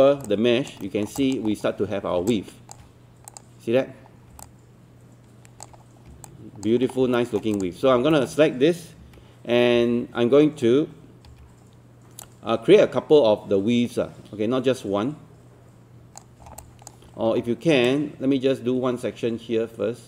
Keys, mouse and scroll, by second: 0.3 alt+click, 0.8 alt+middle click, 1.2 alt+click, 1.5-2.2 scroll up 1, 2.3 alt+click, 3.3 click, 4.1 scroll down 1, 4.5 alt+click, 5.8-6.1 scroll up 1, 6.3 alt+click, 6.9 scroll down 1, 7.1 alt+middle click, 7.5 click, 7.9 scroll down 1, 8.1 alt+middle click, 9.0-9.8 typing, 10.6-11.3 scroll up 1, 11.3 typing, 12.3-16.5 drag, 16.6 alt+click, 17.9-20.0 drag.